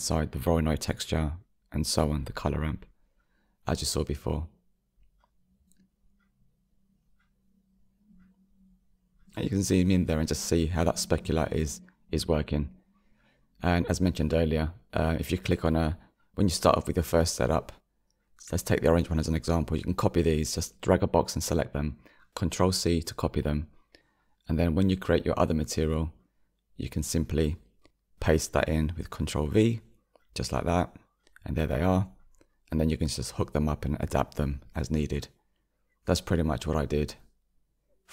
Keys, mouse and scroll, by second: 5.8 click, 8.0-11.4 scroll up 7, 13.3 click, 15.6 click, 18.6-21.4 drag, 25.1 ctrl+c, 25.6-27.9 drag, 29.6 click, 30.3 ctrl+v, 31.2 click, 34.4 Delete, 36.4-37.4 drag, 37.4-38.1 middle drag.